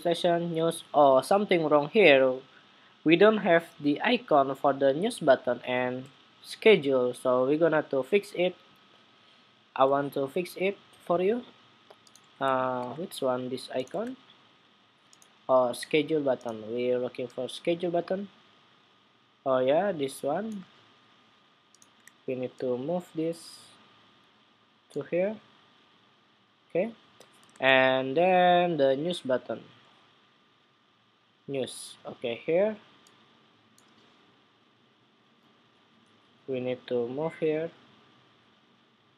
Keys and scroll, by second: 12.5 super+Tab, 13.8 super+Tab, 27.2 super+Tab.